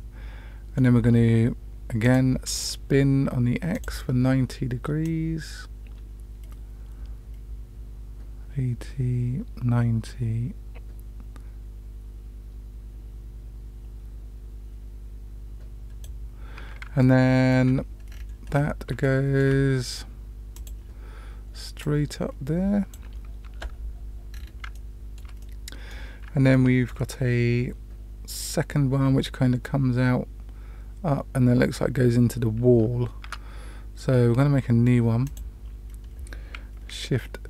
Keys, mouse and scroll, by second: 2.0 click, 3.7 click, 5.0-16.0 drag, 17.0-17.5 shift+middle drag, 18.0 scroll down 2, 18.2 scroll up 1, 18.5-18.9 scroll down 1, 19.0-19.4 shift+middle drag, 20.5 click, 21.8-22.9 drag, 24.3-24.8 scroll down 3, 24.7 shift+middle click, 25.4 middle click, 26.5 shift+middle click, 33.2 Tab, 35.2 click.